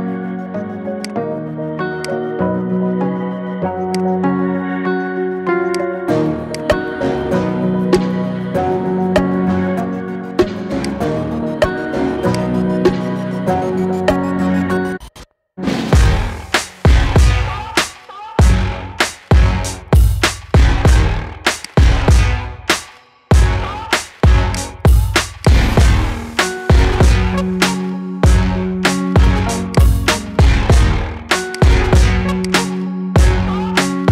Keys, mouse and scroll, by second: 0.9 click, 1.8-3.3 drag, 3.8 click, 10.7 click, 21.4 click, 25.4-27.3 drag, 29.7 click.